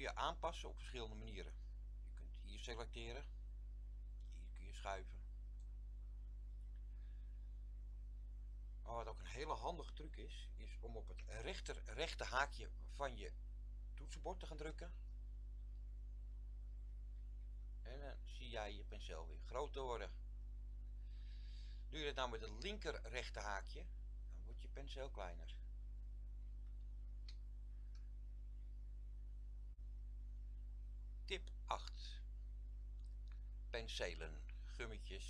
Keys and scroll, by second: 14.9-20.3 typing, 23.8-26.5 typing.